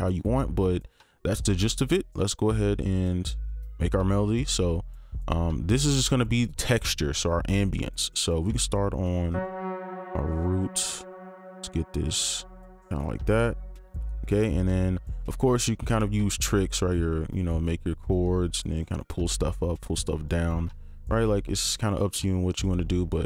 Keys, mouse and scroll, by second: 2.4 typing, 11.4 alt+click, 15.0 ctrl+click, 16.3 shift+click, 20.1 ctrl+click, 22.8 double click.